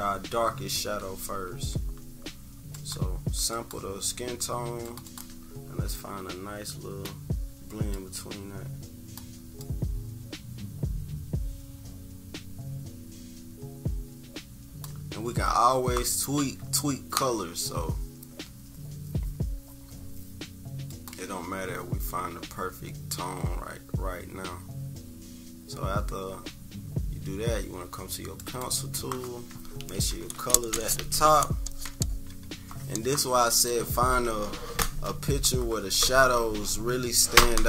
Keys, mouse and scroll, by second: 0.5 -, 0.9 =, 1.2 =, 1.3 scroll up 1, 1.4 =, 2.7 click, 3.5 click, 4.8 click, 5.9-7.0 drag, 7.9-9.1 drag, 9.6-14.9 drag, 20.9 click, 25.6-27.9 scroll down 2, 28.3-33.3 drag.